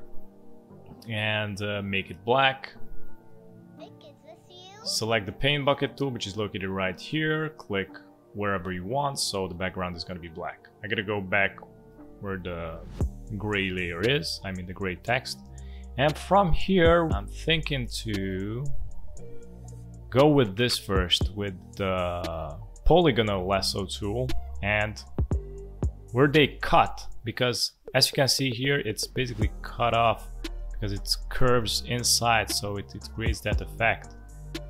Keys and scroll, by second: 17.7 space, 27.7 space, 32.5 space.